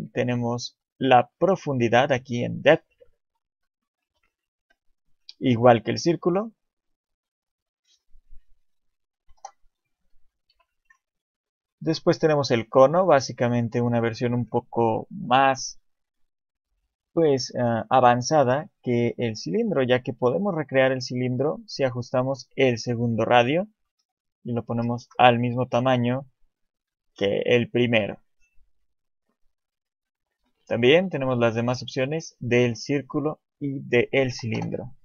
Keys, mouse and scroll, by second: 4.6 shift+middle click, 5.5-7.4 scroll up 1, 8.0 shift+middle click, 9.2 Delete, 10.5 KP_7, 10.9 shift+a, 12.8 middle click, 16.1 click, 24.0 ctrl+c, 24.8 ctrl+v, 29.3 click, 32.6 shift+middle click, 34.3 Delete.